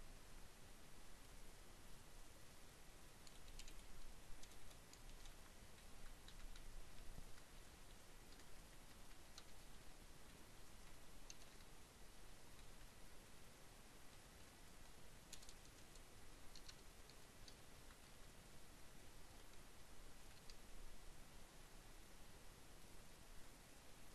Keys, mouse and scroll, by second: 0.2-2.5 drag, 2.5 ctrl+c, 3.3 ctrl+click, 3.6 Return, 4.5 ctrl+v, 5.0 ctrl+Up, 5.1 ctrl+Down, 5.2 ctrl+Right, 7.1 Left, 7.2 Delete, 8.2-9.6 typing, 9.4 Down, 9.5 Left, 9.7 Down, 12.0 Right, 12.3 Up, 12.4 Left, 14.6-15.6 typing, 17.0 Right, 17.1 Down, 17.2 Right, 19.6 Delete, 20.0 4, 22.3-23.7 drag, 23.8-24.1 typing.